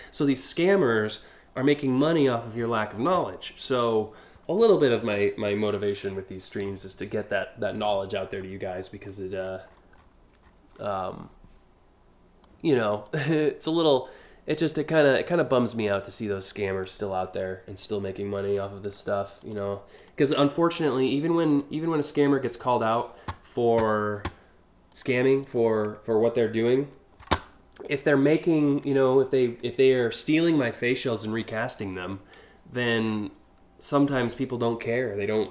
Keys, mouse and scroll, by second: 5.6-5.9 scroll up 1, 6.3 scroll down 3, 6.8 click, 7.9 right click, 8.3 ctrl+click, 8.6 click, 9.0 click, 9.3 click, 9.6 click, 10.0-10.5 scroll up 4, 12.0 click, 13.0-13.5 scroll down 4, 17.4 click, 18.1 ctrl+click, 19.0 click, 19.6 click, 21.1 click, 24.5 click, 25.0 click, 28.7 ctrl+click, 35.3-35.5 drag.